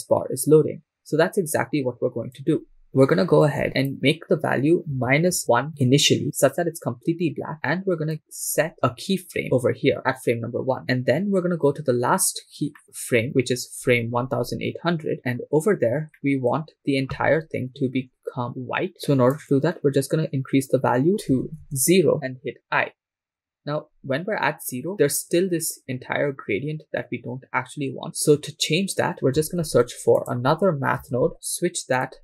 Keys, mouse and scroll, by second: 3.8 click, 8.1-9.4 drag, 9.6 i, 11.5-12.7 scroll down 1, 12.7 scroll down 2, 12.8 middle click, 13.5-14.4 scroll down 2, 14.4-15.1 scroll down 10, 15.1 click, 15.1 middle click, 15.1-16.0 scroll up 5, 16.2 middle click, 17.9 Left, 18.4 Left, 20.1-22.4 shift+drag, 21.1 shift+middle click, 29.6 shift+a.